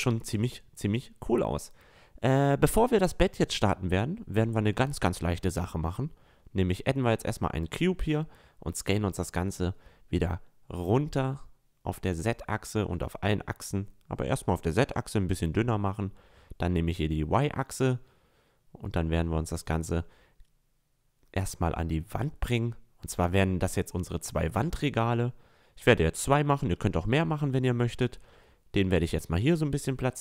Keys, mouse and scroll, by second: 0.0-1.1 middle drag, 5.8-9.3 drag, 7.4 s, 9.6 s, 11.1-13.1 drag, 12.0 s, 14.4 s, 18.0-18.4 scroll up 1, 20.6-23.7 drag, 23.7-24.3 middle drag, 24.9-26.3 middle drag, 26.3 click, 27.5 s.